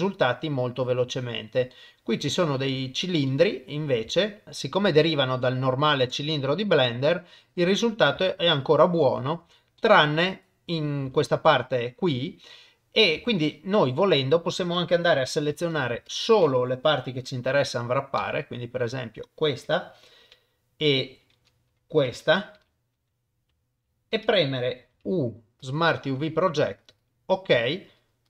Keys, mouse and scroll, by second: 0.0 click, 1.7 middle click, 2.4 shift+middle click, 3.3 middle click, 4.3 shift+middle click, 5.0-6.0 shift+middle drag, 6.3 middle click, 8.3 shift+middle click, 9.0 shift+click, 9.9 middle click, 11.1 Tab, 12.1 Tab, 13.2 Tab, 15.9 alt+a, 18.2 l, 22.6 l, 24.9 u, 27.6 middle click.